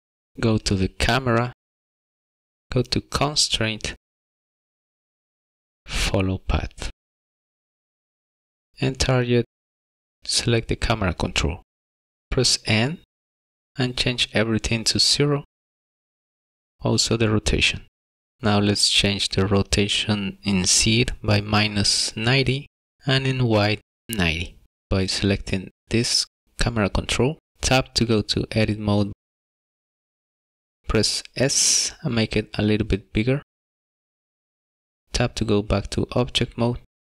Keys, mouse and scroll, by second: 0.0 click, 1.3 click, 3.8 click, 5.3 click, 10.9 click, 12.9 n, 14.5 click, 18.2 click, 18.4 shift+middle click, 18.4 scroll up 3, 19.2 click, 20.5 click, 23.8 click, 24.6-25.0 scroll down 5, 24.7 middle click, 25.3 click, 25.5 click, 26.7 Tab, 28.0 a, 30.0 s, 36.0 Tab, 36.6 middle click.